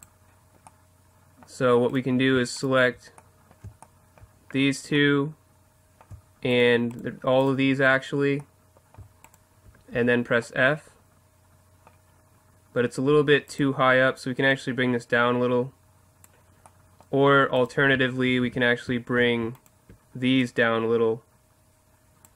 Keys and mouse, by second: 0.6 middle click, 1.9-5.2 right drag, 6.5-11.3 right drag, 9.9 f, 13.5-15.3 right drag, 14.5-16.1 drag, 16.2 click, 17.6-20.4 right drag, 18.4 z, 20.4-22.0 drag.